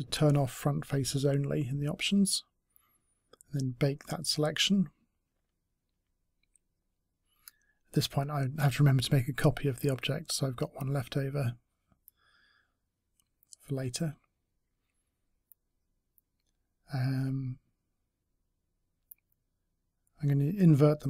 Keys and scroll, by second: 10.6 ctrl+d, 11.5 space.